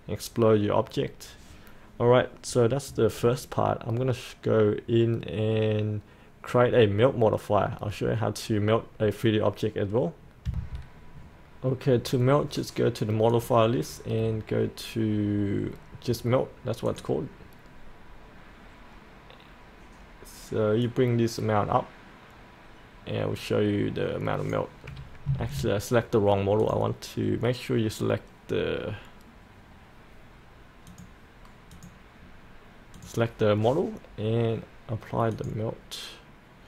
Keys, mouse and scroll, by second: 10.5 F8, 13.3 click, 14.2-16.1 scroll down 1, 16.9-25.3 drag, 25.5 ctrl+z, 26.6 click.